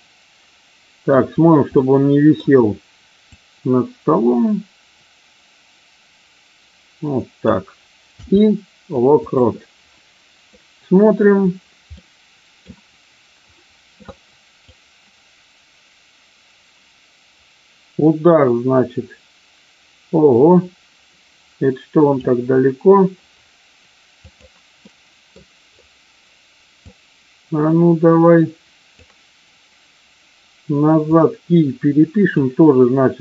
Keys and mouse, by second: 1.6-2.3 middle drag, 3.3-7.5 drag, 10.5-11.2 middle drag, 12.0-12.6 middle drag, 14.7-22.1 drag, 24.1 click, 24.8-25.2 middle drag, 26.7-28.8 drag, 31.1-32.2 drag.